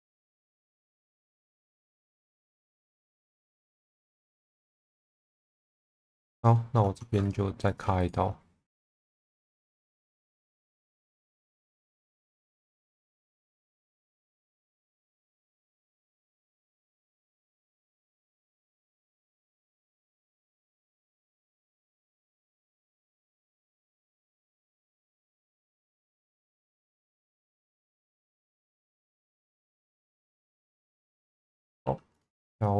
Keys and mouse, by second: 1.1 ctrl+z, 1.5 middle click, 2.7 g, 2.8 b, 3.8 click, 4.8 middle click, 5.4 shift+middle click, 6.0 2, 7.2 shift+click, 7.7 shift+click, 10.2 shift+click, 11.9 1, 12.3 middle click, 13.7 click, 15.7 g, 15.8 b, 17.3 click, 18.2 middle click, 19.2 ctrl+z, 19.6 middle click, 20.0 click, 21.3 g, 21.4 b, 22.0 click, 22.6 click, 23.5 middle click, 24.6 g, 24.9 z, 26.5 click, 27.1 middle click, 28.6 Tab, 29.3 alt+middle click, 29.9 shift+middle click, 30.3 Tab, 31.3 middle click, 31.8 2, 32.2 click.